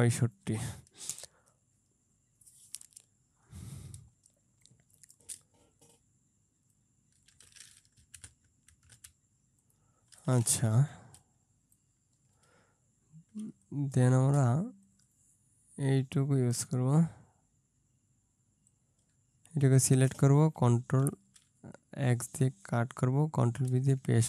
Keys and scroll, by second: 4.0 ctrl+space, 8.2 Left, 8.3 Left, 9.0 Left, 11.2 ctrl+space, 21.1 ctrl+x, 23.7 ctrl+v.